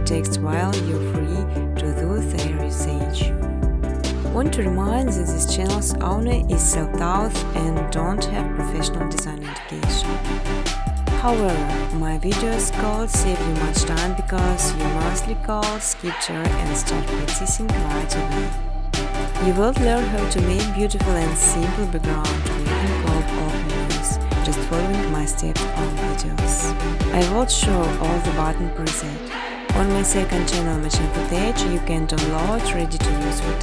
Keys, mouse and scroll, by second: 0.9 click, 2.9 click, 5.5 click, 6.5 click, 7.4 click, 9.0 click, 9.5 click, 10.7 click, 12.2 click, 18.6 click, 18.7 click, 20.3 click, 21.6-23.1 typing, 23.6 Tab, 23.8 Tab, 24.0 Tab, 24.5 Tab, 24.9 Tab, 26.0-28.8 typing, 28.0 Tab, 28.9 Return, 30.5 click, 31.3 click, 32.2 click, 33.0-33.6 typing.